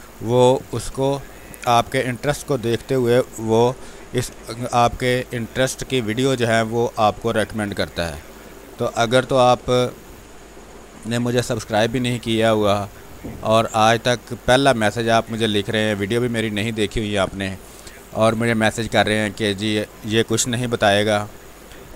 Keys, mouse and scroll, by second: 1.4 click, 1.9 r, 2.2 click, 3.9 b, 4.3 space, 5.4 ctrl+click, 7.7 click, 8.1 click, 8.7 ctrl+z, 9.4-17.4 drag, 19.4 space, 21.4 click.